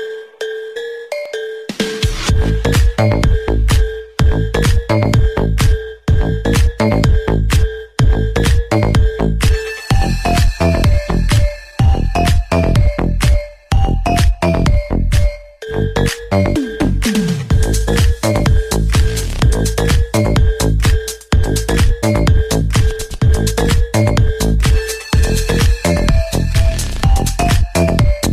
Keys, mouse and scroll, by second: 1.0 ctrl+d, 6.2 ctrl+j.